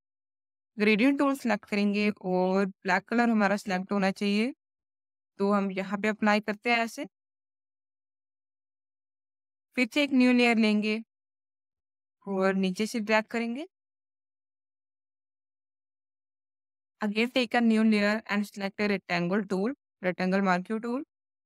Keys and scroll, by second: 1.6 space.